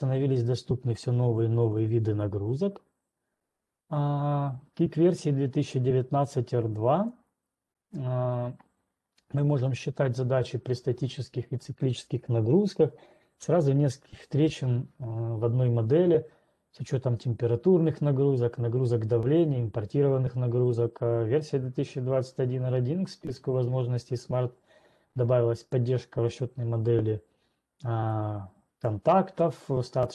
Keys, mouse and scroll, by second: 3.8 click, 8.3 click, 29.3 click.